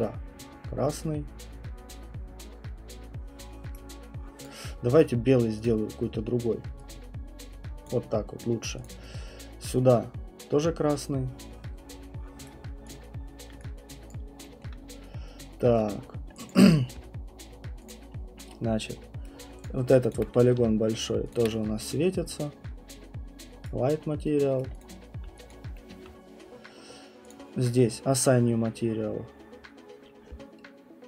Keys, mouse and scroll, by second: 3.7 right click, 4.4 click, 5.6 click, 7.8 click, 8.8 click, 12.4 right click, 12.9 click, 13.1-13.6 scroll, 14.1 alt+click, 14.6 middle click, 14.7 alt+middle click, 14.8 middle click, 15.1 middle click, 15.3 middle click, 15.6 alt+middle click, 15.7 alt+middle click, 16.0 middle click, 16.5 alt+click, 17.9 click, 19.2 right click, 19.6 click, 20.1 alt+click, 21.3 shift+click, 23.6 right click, 24.6 right click, 24.8 click, 25.0 scroll, 25.5 alt+click, 25.7 middle click, 25.9 alt+middle click, 25.9 alt+middle click, 26.6 middle click, 26.6 middle click, 26.7 middle click, 27.3 click.